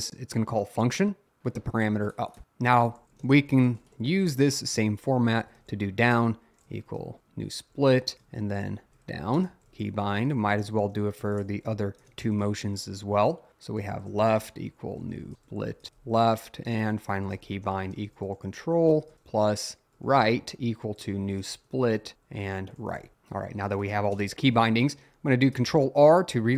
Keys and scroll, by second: 2.4 Return, 2.5-12.5 typing, 13.6-24.4 typing, 25.6 ctrl+r.